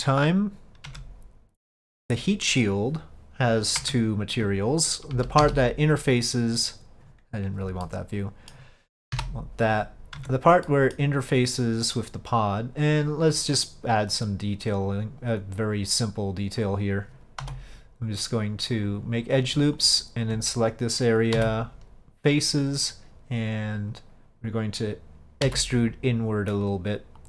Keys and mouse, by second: 1.0 Tab, 5.2 KP_5, 7.9-8.6 middle drag, 9.2 KP_Divide, 10.3 Tab, 10.7 middle click, 13.4-15.0 drag, 15.6-16.7 drag, 18.9 click, 19.9 alt+click.